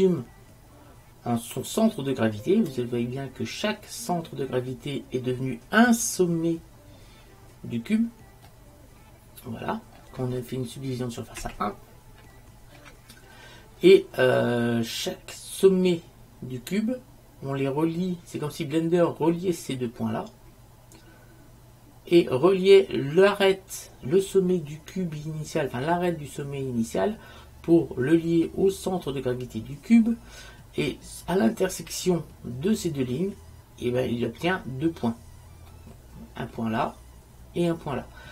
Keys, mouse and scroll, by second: 8.6-10.0 middle drag, 11.5 KP_1, 35.8-37.7 middle drag.